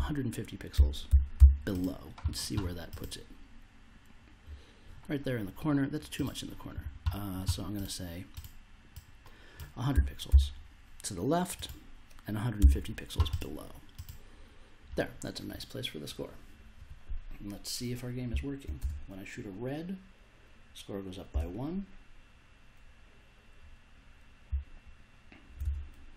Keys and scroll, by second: 0.0-1.8 typing, 9.9 1, 10.2 0, 12.6 BackSpace, 18.3 s, 18.7 space, 21.3 space, 24.4 s, 25.6 space.